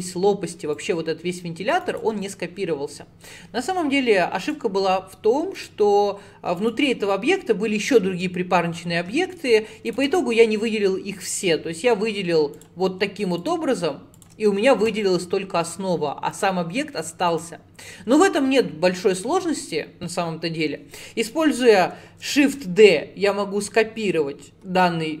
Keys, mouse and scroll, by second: 0.0 click, 0.8 click, 4.5 click, 5.6 click, 6.6 click, 9.9 shift+click, 12.6 click, 13.4 click, 14.2 shift+click, 16.4 click, 17.3 click, 22.5 shift+d.